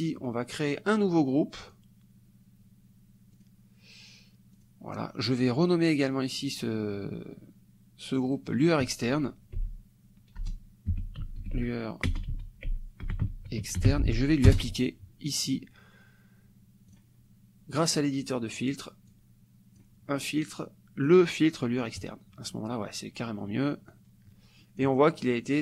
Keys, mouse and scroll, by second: 1.7 click, 3.3 click, 4.6 click, 8.2-9.6 drag, 9.6-14.4 typing, 14.5 Return, 16.9 click, 17.8 click, 19.1 click, 22.0 click, 23.9-25.0 drag.